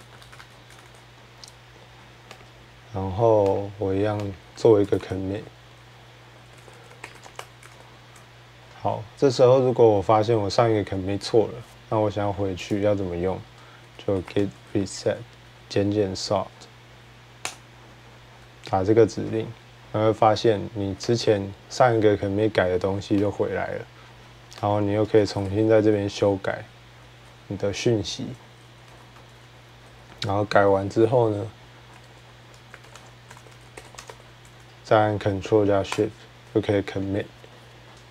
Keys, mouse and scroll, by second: 0.0-0.8 typing, 2.2 click, 3.4 click, 3.7-7.7 typing, 4.1 click, 12.5-14.2 drag, 13.6-15.0 typing, 17.7-18.7 typing, 21.0 click, 23.2 click, 24.5 click, 24.7-25.9 typing, 27.1-29.7 typing, 29.2 click, 30.9-36.6 typing, 35.7 ctrl+Return.